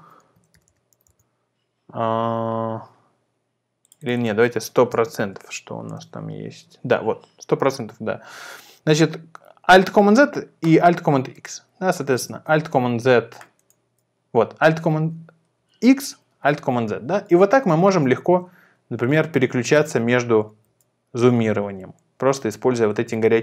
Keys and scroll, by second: 0.2-1.5 typing, 4.6-6.1 typing, 12.3 alt+z, 13.9 alt+super+x, 15.0 alt+super+z, 15.5 alt+super+x, 16.5 alt+super+z, 17.3 alt+super+x, 18.2 alt+super+z, 19.1 alt+super+x, 19.7 alt+super+z, 20.7 alt+super+x, 21.4 alt+super+z, 22.1 alt+super+x, 22.7 alt+super+z.